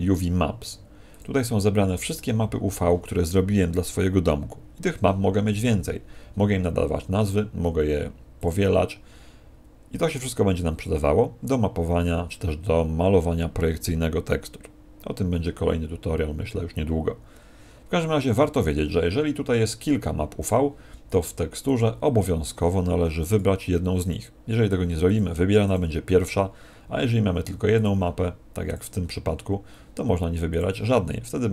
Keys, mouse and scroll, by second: 1.0 click, 8.3 click, 21.6 click, 23.2 click, 27.7 click, 28.6 click.